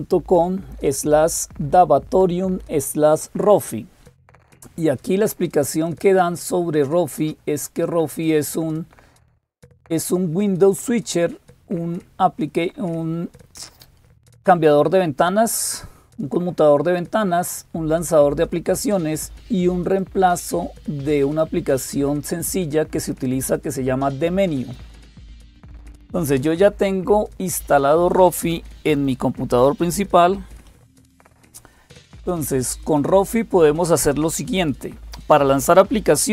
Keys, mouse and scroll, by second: 0.0-36.3 typing, 5.7 click, 19.8-22.4 drag, 24.5 click, 25.2-27.4 scroll down 2, 27.4 click, 30.3 super+7, 32.7 click.